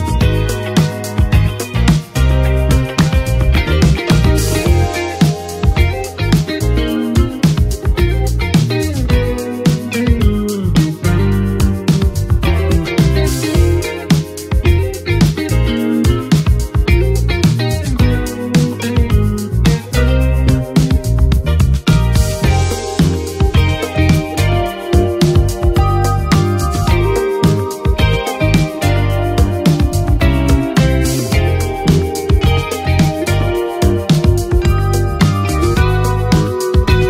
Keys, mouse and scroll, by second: 3.2-5.6 drag, 5.8 shift+click, 6.7 ctrl+d, 8.2 click, 10.3 Page_Up, 11.8-21.5 drag, 21.9 right click, 23.9 click, 27.0 ctrl+d, 28.0-29.5 drag, 29.5 Page_Down, 31.2-37.0 drag.